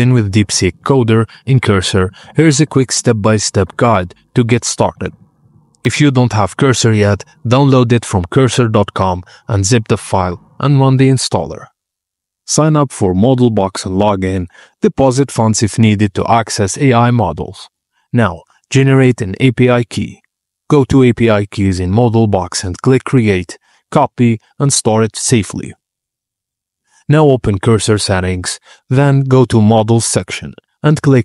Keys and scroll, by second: 0.0-5.9 typing.